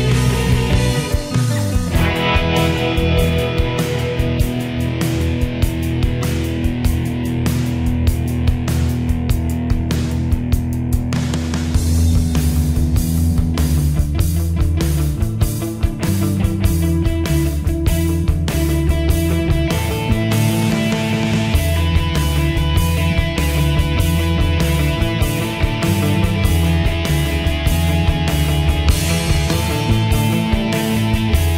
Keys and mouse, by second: 6.2 right click, 8.4 click, 30.8 click.